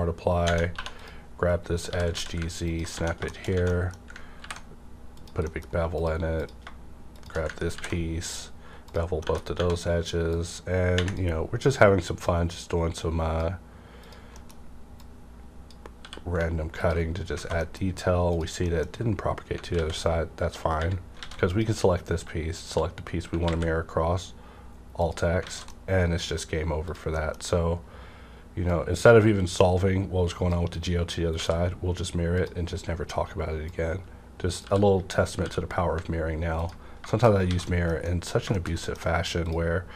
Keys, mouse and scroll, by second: 0.5 Tab, 0.8 2, 0.9 click, 1.8-2.1 typing, 2.9 Tab, 3.3 middle click, 4.4 ctrl+b, 5.2 click, 5.4 middle click, 5.6 click, 5.9 click, 7.7 ctrl+b, 8.3-8.8 scroll up 1, 8.8 click, 9.1 middle click, 9.3 Tab, 9.3 middle click, 10.3 click, 10.3-11.6 drag, 11.6-14.3 drag, 14.3 middle click, 15.0-16.8 drag, 15.3 middle click, 16.0 w, 17.1 scroll down 1, 17.4 alt+a, 17.8 middle click, 17.8 scroll up 1, 18.2 click, 18.5 scroll up 1, 18.6 middle click, 19.8 alt+x, 21.2 alt+a, 21.4 click, 22.6 shift+click, 23.5 alt+x, 24.1 scroll down 1, 25.0 click, 25.4 alt+a, 25.7 alt+a, 25.7 middle click, 26.4 scroll up 1, 26.9 click, 27.1 middle click, 27.4 scroll up 1, 28.7-32.4 drag, 31.4 w, 33.6-36.6 drag, 34.6-35.4 typing, 36.8 scroll down 2, 37.1 shift+middle click, 37.4 alt+a, 38.0 alt+middle click, 38.5 shift+middle click, 39.0 scroll up 1, 39.5 click.